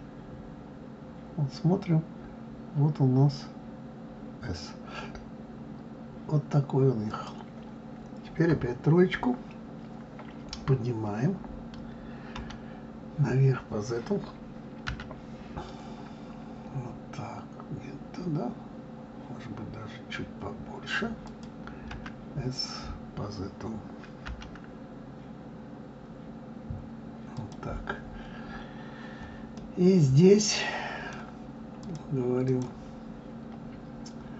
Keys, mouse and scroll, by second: 8.5 KP_3, 29.5-31.8 middle drag, 31.8 click, 32.4 click.